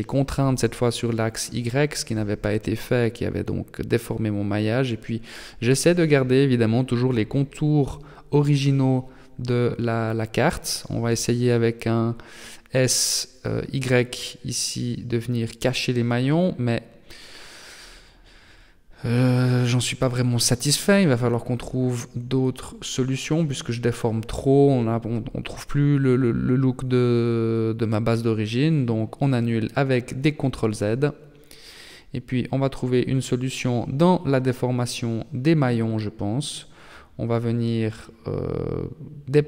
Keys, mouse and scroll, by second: 2.2 alt+right click, 3.2 s, 7.8 alt+right click, 8.3 alt+shift+right click, 9.1 alt+shift+right click, 9.5 alt+shift+right click, 10.5 alt+shift+right click, 11.8 b, 13.5 s, 17.4 Tab, 19.4 middle click, 26.1 Tab, 26.6 middle click, 28.2 ctrl+z, 28.7 ctrl+z, 29.7 Tab, 30.9 scroll down 2, 31.5 shift+middle click, 32.9 right click, 34.3 KP_1, 35.0 KP_3, 36.2 shift+middle click, 36.7-37.1 scroll up 3, 37.1 Tab, 38.4 a, 38.7 b.